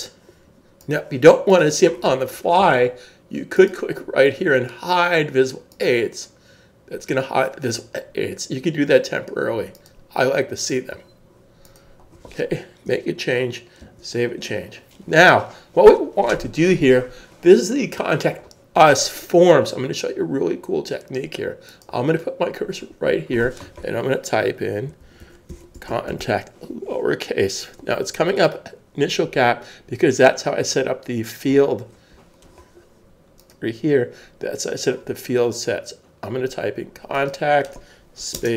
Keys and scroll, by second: 13.8 super+s, 25.0-26.2 typing, 27.2 typing.